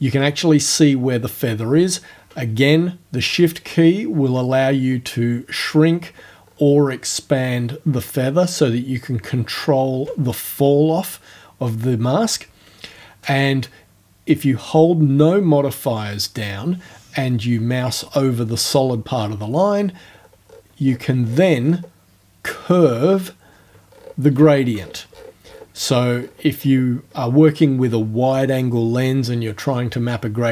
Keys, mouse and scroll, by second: 3.7-4.5 shift+scroll up 2, 4.5 shift+scroll up 1, 5.8-6.4 shift+scroll down 2, 6.5-7.1 shift+scroll down 2, 9.0-9.4 shift+scroll up 4, 20.0-20.7 scroll down 2, 20.9-22.0 scroll down 6, 23.9-26.9 scroll up 16, 27.1-27.5 scroll up 2.